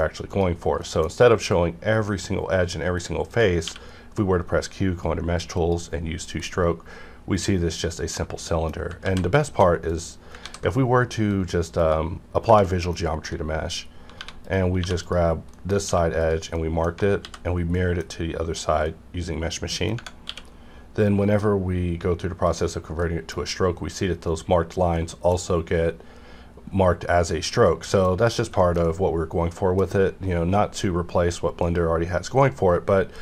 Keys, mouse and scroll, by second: 0.2 click, 0.8 middle click, 3.3 click, 3.6 q, 5.5 click, 6.4-9.0 middle drag, 9.0 ctrl+z, 9.4 shift+middle click, 9.9 click, 10.4 ctrl+a, 11.3 click, 11.7 click, 12.4 Tab, 12.7 middle click, 13.0 scroll up 1, 14.1 1, 14.4 click, 14.8 2, 14.9 click, 15.5 middle click, 15.8 q, 16.2 click, 16.5 middle click, 17.2 alt+x, 17.7 middle click, 19.0 middle click, 20.2 q, 22.5 click, 23.0-28.1 middle drag, 28.1 scroll down 1, 28.6 shift+middle click, 28.8 scroll down 1, 31.6 click.